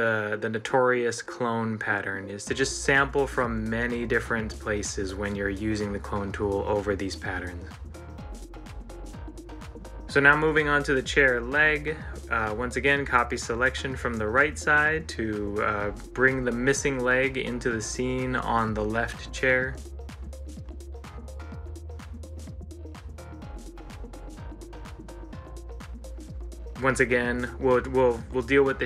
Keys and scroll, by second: 5.0 ctrl+s, 8.4 ctrl+c, 8.7 ctrl+l, 13.6 ctrl+z, 16.4 ctrl+z, 19.2 ctrl+z, 21.1 ctrl+z, 23.5 ctrl+z.